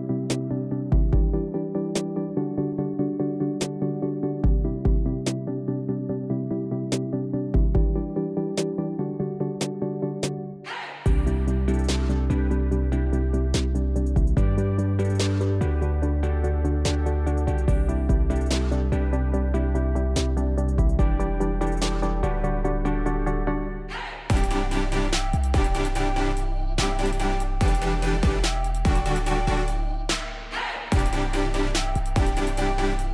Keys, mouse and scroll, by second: 0.1 Return, 1.1 space, 2.3 space, 3.6 click, 3.6 typing, 5.3 click, 8.9-10.7 typing, 11.1 click, 12.2 alt+click, 12.7-16.0 typing, 15.6 click, 18.8 space, 20.0 click, 20.9 0, 21.3 click, 21.9 click, 22.3 click, 22.7-23.8 typing, 23.3 click, 27.0 space, 27.3 space, 28.1 space, 29.7-32.6 scroll, 32.6 click, 32.6 scroll.